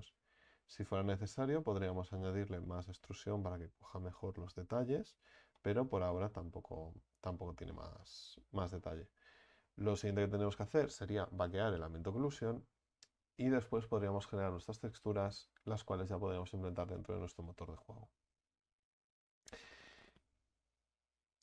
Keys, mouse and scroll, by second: 7.2-8.0 scroll up 5, 8.0-8.6 middle drag, 8.6-12.3 scroll down 4, 12.3-12.8 scroll down 2, 17.8 Tab, 18.3 Tab.